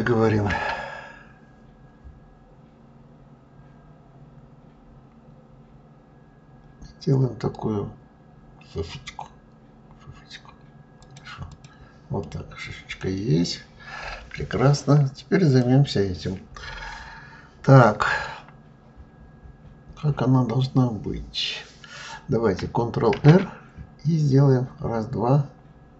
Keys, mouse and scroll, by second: 11.2 click, 11.9-12.9 middle drag, 12.9-13.3 scroll down 2, 15.2 click, 22.8 ctrl+r.